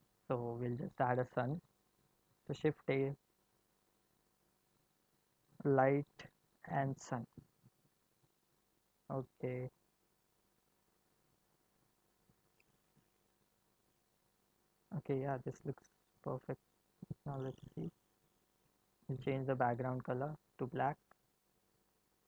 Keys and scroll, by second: 2.3 shift+a.